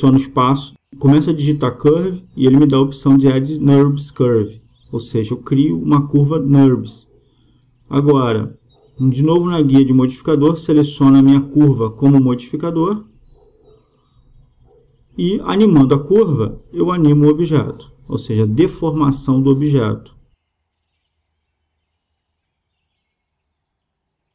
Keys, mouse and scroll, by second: 0.1 space, 11.0-12.9 right drag, 12.2-13.9 drag, 15.0-16.7 drag, 17.9-19.8 right drag, 18.8-20.6 drag.